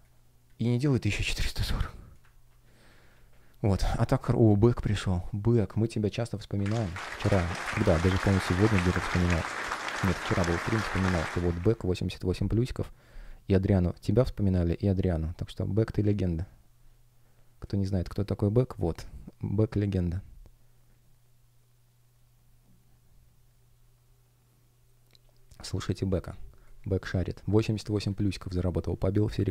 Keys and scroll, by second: 2.2 super+ц, 3.8 F1.